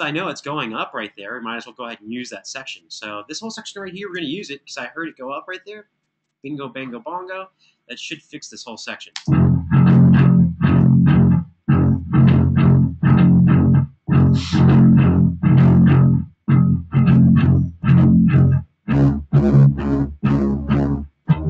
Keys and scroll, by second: 3.8 super+e, 8.8 space.